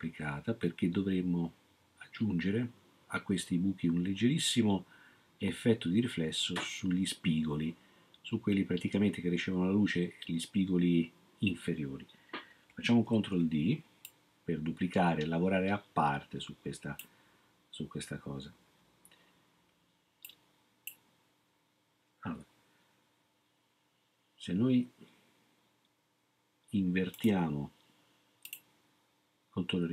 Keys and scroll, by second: 13.1 ctrl+d.